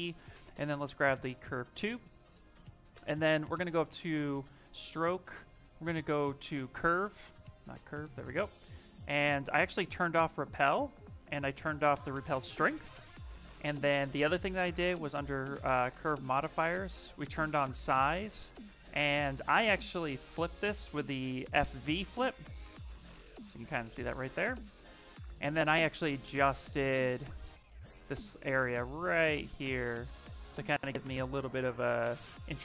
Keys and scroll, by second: 2.2 s, 22.1 shift+m, 24.1 shift+m.